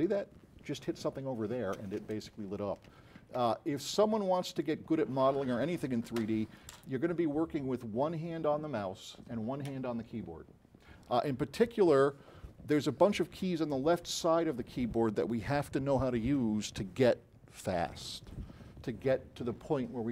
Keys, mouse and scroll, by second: 0.0-0.1 typing.